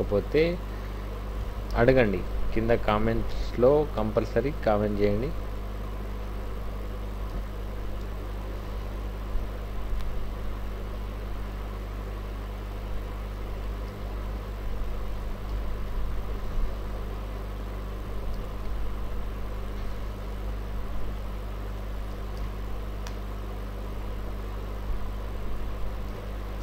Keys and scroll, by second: 1.7 ctrl+shift+t, 7.2 ctrl+t, 8.9 Down, 10.0 Right, 13.7 Up, 13.9 Right, 14.1 Right, 14.3 Right, 15.5 ctrl+shift+t, 18.3 ctrl+t, 20.1 Down, 20.4 Left, 21.2 Left, 22.4 ctrl+shift+t, 26.1 ctrl+t.